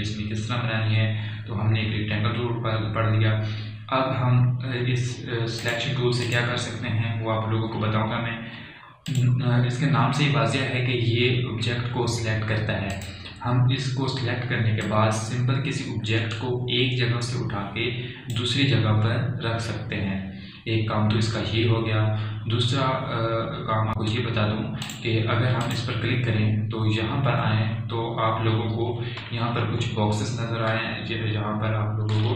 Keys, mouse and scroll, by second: 6.6 click, 8.9 alt+scroll down 1, 10.1 click, 13.9-21.8 drag, 25.9 click, 26.7 typing, 30.6 alt+scroll up 1.